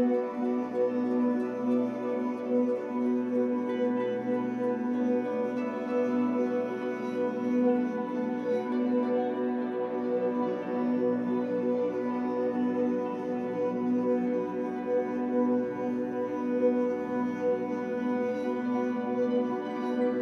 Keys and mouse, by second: 2.6-3.8 drag, 4.0-6.7 drag, 6.7 ctrl+s, 7.8-13.4 drag, 14.1 click, 15.3 click, 16.3-17.3 typing, 17.7 click.